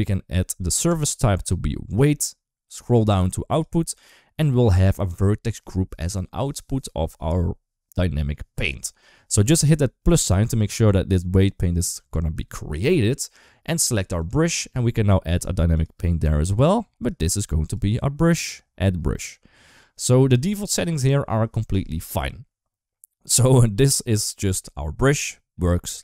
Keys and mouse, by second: 0.7-1.9 drag, 3.3 click, 9.9 click, 14.0 click, 15.6 click, 16.8-17.5 drag, 18.1 click, 23.2 click.